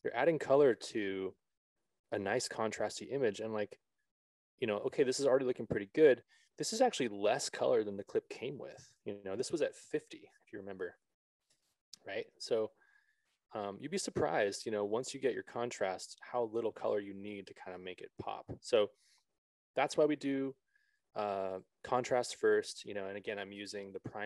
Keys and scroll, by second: 10.9 a, 12.0 Return.